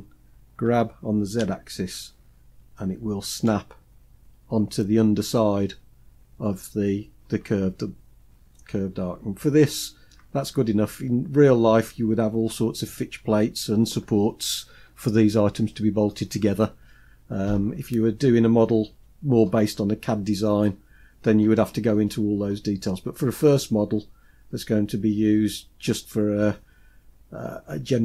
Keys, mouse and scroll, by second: 0.0 g, 6.9 scroll down 2, 7.7-9.5 scroll down 10, 9.5-10.6 middle drag, 10.7-12.1 scroll up 8, 16.9-17.4 scroll down 2, 17.6-18.7 scroll down 3, 18.7-21.1 scroll down 2, 26.9-28.0 scroll down 2.